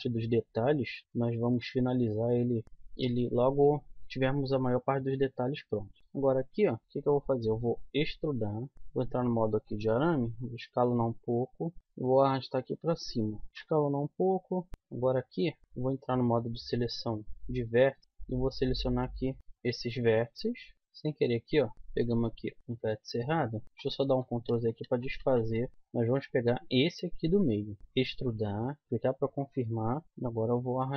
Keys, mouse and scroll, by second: 0.7 z, 1.0-3.3 middle drag, 3.0 z, 4.0 click, 5.2 middle click, 6.0 KP_1, 7.8 e, 8.8 z, 10.3 s, 11.8 g, 13.5 z, 13.5 s, 14.7 a, 15.6 a, 16.8 click, 18.0 z, 18.3 click, 20.3 KP_1, 22.0 ctrl+z, 22.6 ctrl+z, 23.6 ctrl+z, 24.1 ctrl+z, 24.5 ctrl+z, 24.8 ctrl+z, 25.2-25.7 ctrl+z, 27.9 e, 29.4 KP_1, 30.2 z, 30.3 g.